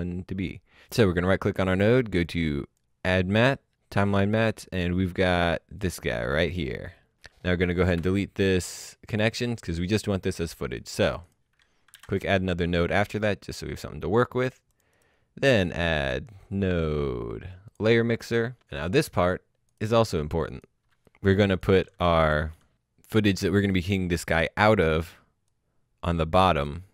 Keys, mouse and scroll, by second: 0.7 right click, 1.7 click, 3.5 click, 5.0 click, 7.9 Delete, 9.2 click, 11.9 alt+s, 12.7 click, 14.9 right click, 16.0 click, 17.3 click, 20.8 Delete, 21.1 click.